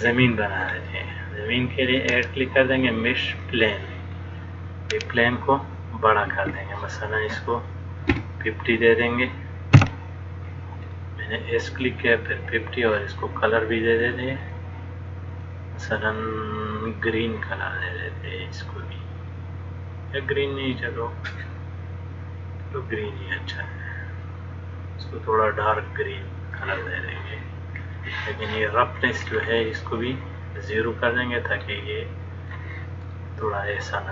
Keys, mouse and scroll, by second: 0.1-0.8 scroll down 1, 1.7-2.1 scroll down 2, 2.1 click, 6.5 s, 11.1 middle click, 12.3 scroll down 1, 14.7 click, 15.7 click, 17.1 click, 29.5 scroll down 3, 31.3 click, 31.3 scroll down 1, 33.3 middle click.